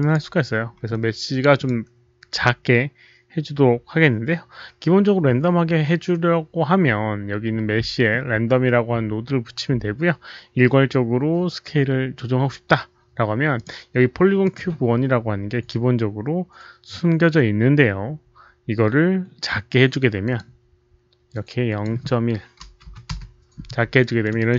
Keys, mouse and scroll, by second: 1.5 click, 3.4 click, 5.5 click, 7.5 click, 8.9 click, 10.8 click, 13.5 click, 14.4 click, 20.2 click, 21.3 click, 22.5-24.4 typing, 23.1 Return, 23.1 click, 23.9 Return, 23.9 alt+middle drag, 23.9 click, 24.2 alt+right click, 24.4 Return, 24.4 click.